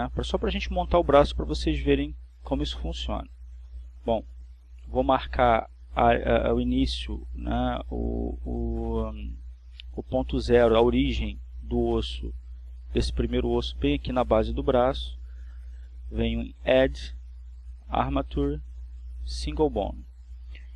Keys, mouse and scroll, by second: 0.0 a, 9.5 click, 17.3 click, 18.0 click, 20.1 click.